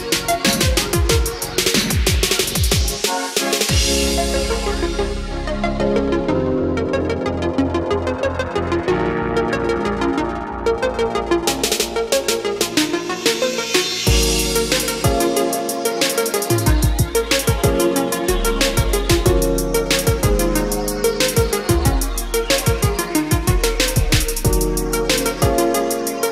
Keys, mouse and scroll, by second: 1.1-5.2 drag, 7.4-17.0 drag, 17.0 KP_7, 18.5-26.3 drag.